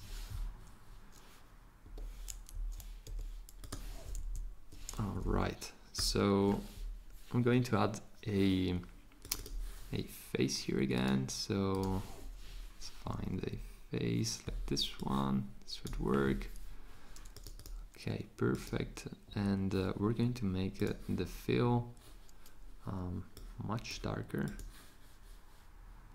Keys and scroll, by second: 1.8 Escape, 3.1 v, 4.2 shift+Left, 13.3 Up.